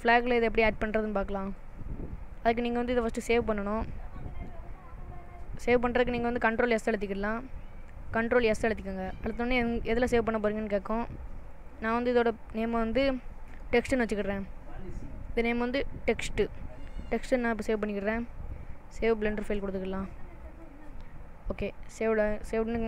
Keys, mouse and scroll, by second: 3.2-4.2 scroll down 2, 3.7 middle click, 8.8 ctrl+s.